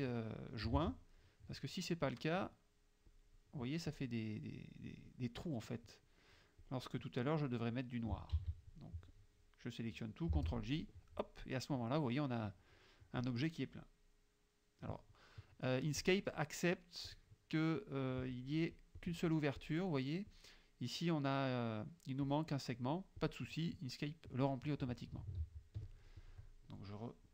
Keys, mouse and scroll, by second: 0.8 ctrl+z, 3.2 click, 3.9 click, 6.7 click, 8.4 ctrl+a, 10.4 shift+j, 16.1 click, 16.8 click, 17.2 click, 18.8 click, 19.7 click, 20.4 click, 22.3 click, 23.2 click, 25.4 ctrl+z, 25.9 ctrl+click, 26.2 ctrl+click.